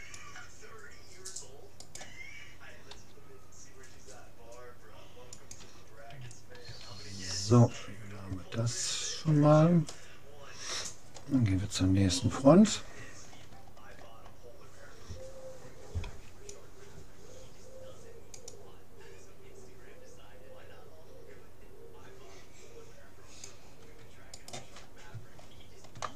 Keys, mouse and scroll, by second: 2.0-3.6 drag, 3.0 g, 6.8 a, 8.2-11.6 middle drag, 12.4 middle click, 15.8 middle click, 16.0 c, 24.8 middle click, 25.4-26.1 middle drag.